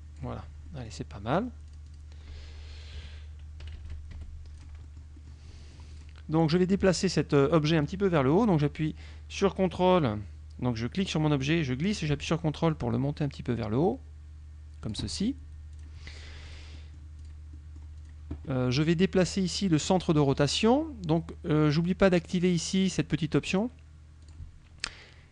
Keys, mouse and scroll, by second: 0.7 middle click, 1.8 click, 3.0 F1, 3.6 KP_Subtract, 4.2 F1, 4.7 click, 5.0 middle click, 5.2 click, 6.0 click, 6.7 click, 9.0-15.2 drag, 15.8 click, 16.6 click, 20.5 click, 24.4 click.